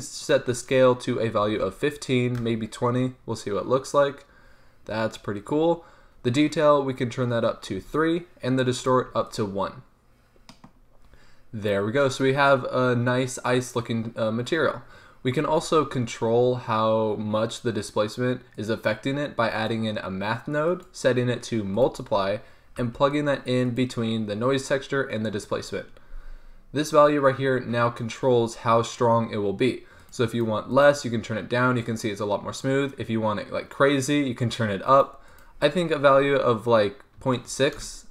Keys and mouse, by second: 0.0 middle click, 0.3-5.3 drag, 6.4-15.6 drag, 15.6 shift+a, 19.8-22.9 drag, 22.9 g, 26.1-30.1 middle drag, 30.1-37.3 drag.